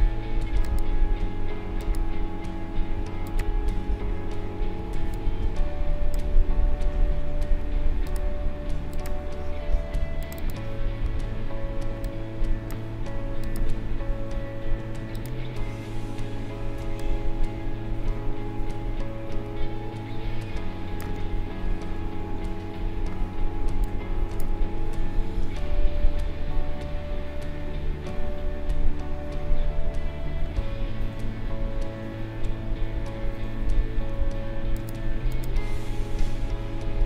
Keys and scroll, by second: 4.8 space, 16.8 space, 22.0 ctrl+-, 23.4 space.